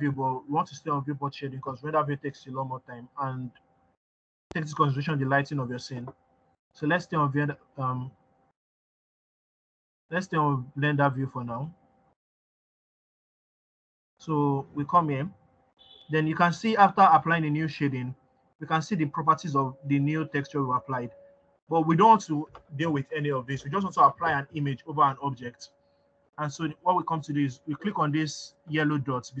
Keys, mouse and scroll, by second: 8.5 click, 14.7 click, 26.4-29.4 scroll up 1.